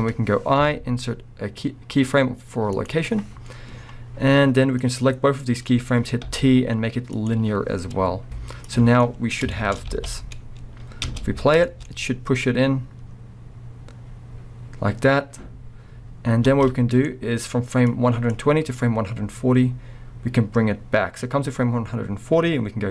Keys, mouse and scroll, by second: 0.6 i, 3.7-4.8 scroll down 3, 4.8-9.5 drag, 6.3 t, 9.2-9.5 scroll down 3, 9.5-11.8 shift+middle drag, 9.9 alt+a, 10.3 scroll up 1, 10.9 scroll down 1, 11.1 space, 16.5 space, 16.9 click, 17.9-22.9 drag, 21.6 scroll down 1, 22.3 scroll up 1.